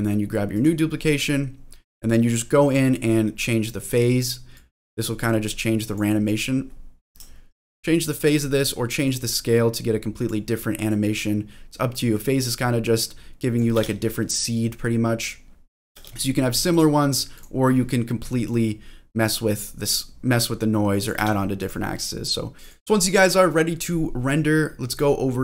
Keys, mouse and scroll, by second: 0.5 click, 2.6 click, 4.5-5.9 drag, 8.0 click, 9.0-10.2 drag, 10.9-13.6 drag, 13.7 space, 16.0 space, 16.7 click, 17.4 click, 18.4-21.0 drag, 21.2 space, 21.7 click, 24.9 click.